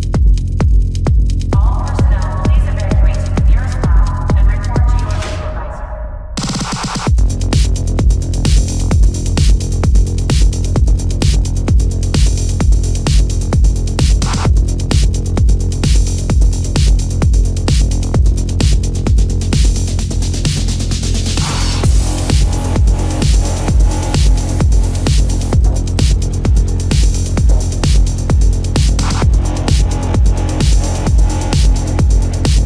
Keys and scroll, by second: 3.2 ctrl+alt+z, 4.7 ctrl+alt+z, 5.7 ctrl+alt+z, 7.2 space, 11.7 ctrl+=, 12.3 space, 18.2 space, 19.0 ctrl+=, 19.4 ctrl+=, 20.3 ], 28.7 space, 32.4 space.